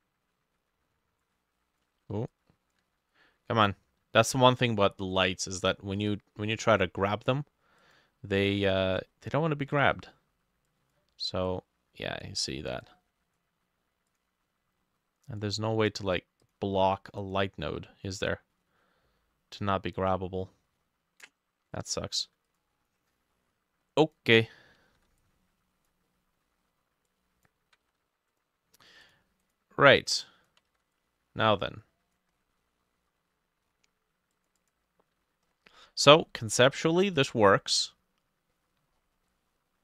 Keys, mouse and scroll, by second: 2.0 ctrl+z, 2.9 ctrl+z, 8.9 ctrl+s, 23.1 middle click, 25.0 ctrl+d, 26.1 middle click, 27.9 ctrl+z, 29.5 double click, 30.6-38.6 ctrl+drag, 30.6 ctrl+middle click, 30.7 ctrl+z, 32.4-32.7 scroll down 1, 32.7 middle click, 35.5-36.2 scroll up 10, 36.6 middle click, 37.3-37.8 scroll down 6, 37.8 middle click, 38.6 middle click, 38.8-39.3 scroll down 4.